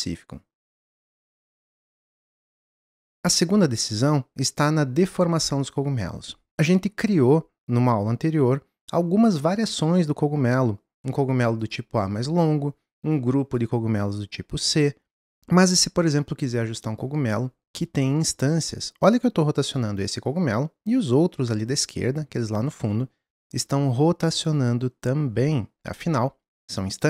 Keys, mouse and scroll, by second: 3.0-11.6 middle drag, 11.6 click, 13.1 click, 15.2 click, 15.4 ctrl+z, 17.0 click.